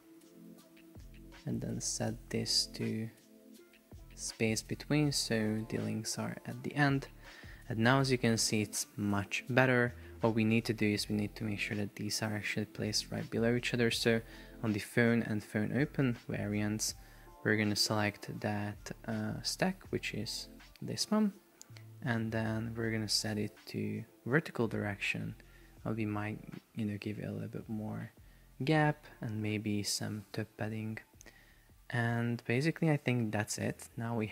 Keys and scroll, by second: 26.2 shift+Up, 27.1 shift+Down, 27.6 shift+Up, 28.4 shift+Down, 28.8 shift+Up, 30.7 shift+Up, 31.6 shift+Down.